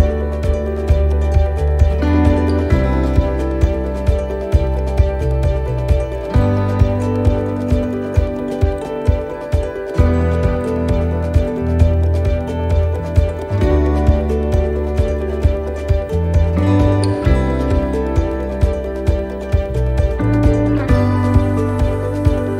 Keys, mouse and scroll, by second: 0.8 middle click, 1.4 shift+middle click, 1.9 scroll up 3, 2.3 shift+middle click, 3.0 middle click, 4.3 right click, 6.1 click, 6.8 right click, 8.1 e, 10.5 middle click, 11.0-11.8 scroll down 7, 11.8 shift+middle click, 12.2 scroll up 4, 12.8 shift+middle click, 14.4 l, 15.6 shift+r, 16.0 right click, 17.9 click, 19.7 ctrl+z, 21.2 l.